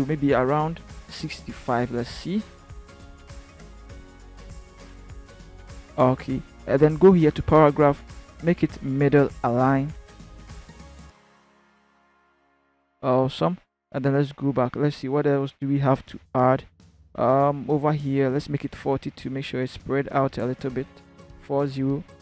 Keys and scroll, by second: 1.1 6, 1.3 5, 1.8 Return, 19.5 5, 20.0 BackSpace, 20.5 4, 21.1 0, 21.5 Return.